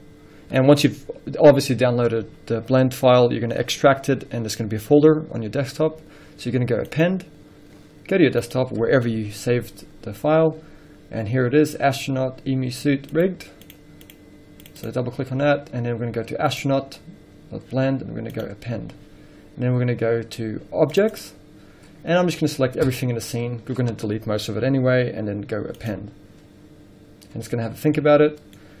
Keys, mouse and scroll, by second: 7.3-28.1 drag, 28.1-28.8 middle drag.